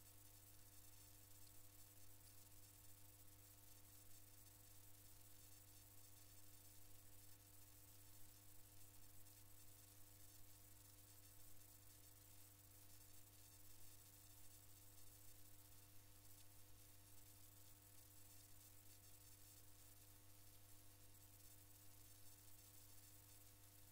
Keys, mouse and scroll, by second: 5.1 alt+KP_3, 8.2 alt+KP_6, 15.3-22.6 drag, 23.3-23.9 drag.